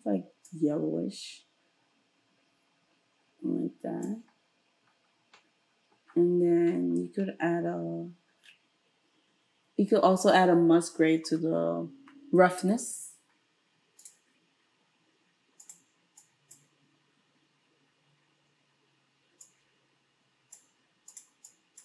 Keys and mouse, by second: 1.2-11.9 drag, 11.3 space, 16.2-21.2 drag, 21.5-21.8 drag.